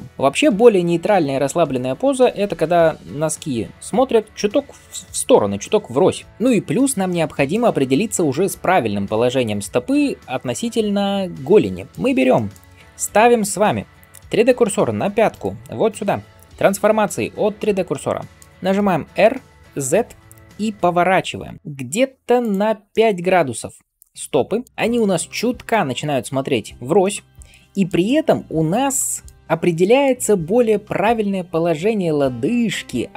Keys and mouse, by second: 15.3-17.9 shift+middle drag, 19.1-33.1 middle drag, 19.1 r.